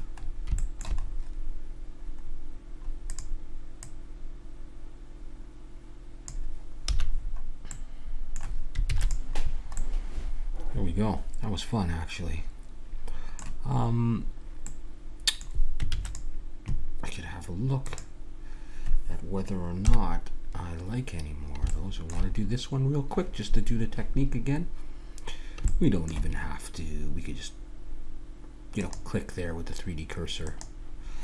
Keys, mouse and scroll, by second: 3.1-5.7 right drag, 6.9 a, 7.1 middle click, 8.8 ctrl+s, 13.7-15.9 middle drag, 15.9 ctrl+s, 17.8-19.1 drag, 19.8 KP_1, 21.2-22.3 middle drag, 23.6-28.6 middle drag, 28.8-31.2 right drag.